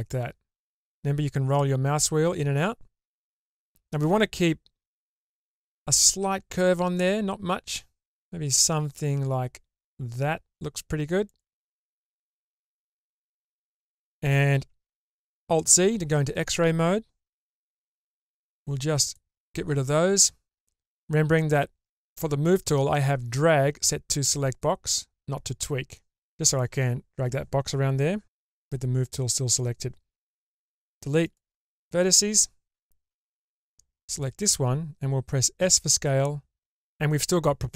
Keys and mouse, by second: 12.1-13.1 shift+middle drag, 14.9 alt+z, 18.1-19.5 drag, 26.2-30.2 drag, 30.2 Delete, 33.6 click, 35.6 s.